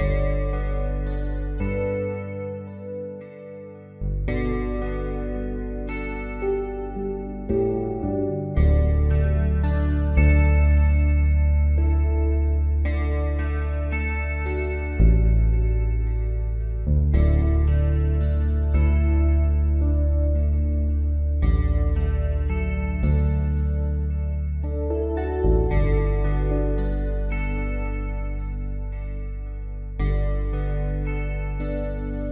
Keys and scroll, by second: 2.2 v.